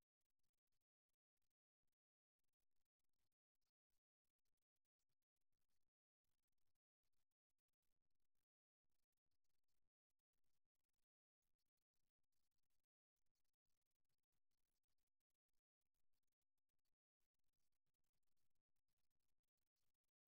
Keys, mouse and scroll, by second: 1.0 a, 4.5-6.4 drag, 11.3-16.8 drag, 18.8-20.2 drag.